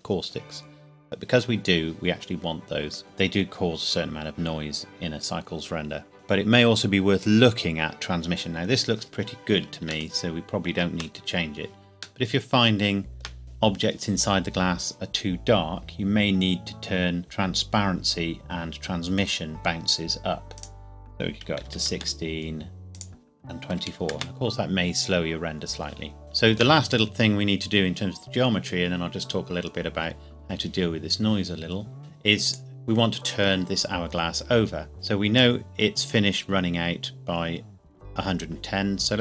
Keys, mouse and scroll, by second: 10.2 shift+middle click, 20.6 click, 21.4 click, 21.5 KP_1, 21.6 KP_6, 21.9 KP_Enter, 23.0 click, 23.7 KP_2, 23.9 KP_4, 24.2 KP_Enter, 26.2 shift+middle click, 32.0 click, 32.5 click, 35.4 click.